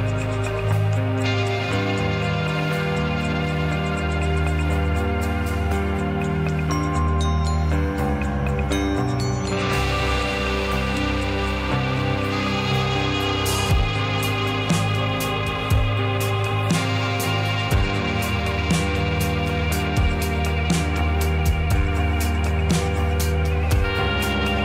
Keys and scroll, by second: 5.1 ctrl+d, 13.7 ctrl+d.